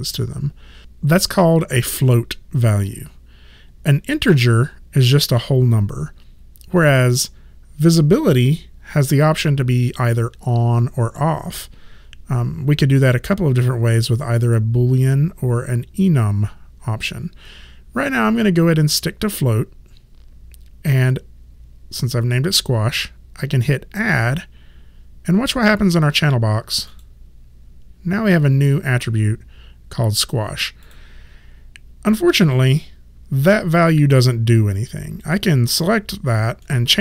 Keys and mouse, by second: 26.9 click, 30.8 click, 35.2 click, 36.6 middle click.